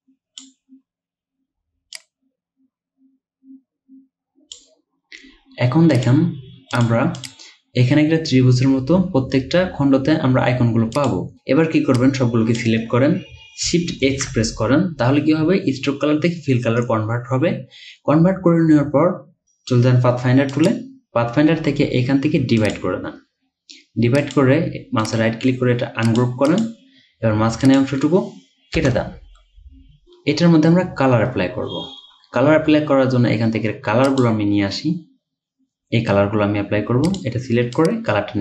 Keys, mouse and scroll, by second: 7.2 double click, 14.1 x, 25.1 right click, 26.5 double click, 28.8 BackSpace, 31.8-32.9 alt+scroll down 1.